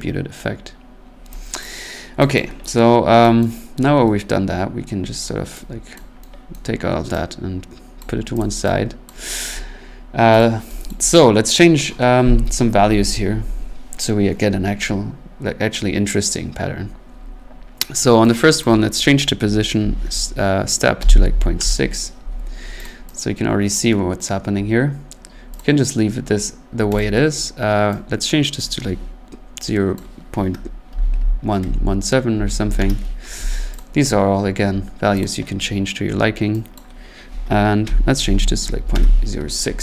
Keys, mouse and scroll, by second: 0.6-1.1 scroll, 1.6 click, 2.3 click, 3.4 click, 5.2 right click, 5.9 click, 6.5 right click, 8.0 click, 8.4 click, 9.1 click, 9.5 middle click, 10.4 click, 10.9 click, 18.6 click, 19.8-22.4 typing, 22.8 click, 23.7 click, 25.6 click, 27.0 click, 28.3 click, 29.9 click, 30.6-33.0 typing, 33.8 click, 35.2 click, 36.7 click, 37.8-38.8 typing, 38.9 Return.